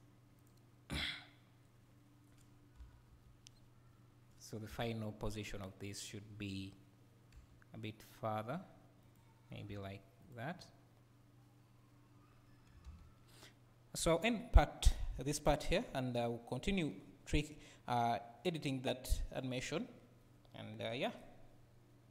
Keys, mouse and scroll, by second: 0.4 click, 1.1-1.8 scroll down 1, 2.8 Up, 4.0-4.7 scroll down 1, 4.7 KP_7, 5.3 scroll down 1, 7.3 g, 9.0 g, 9.7 g, 10.3 click, 12.2 scroll up 2.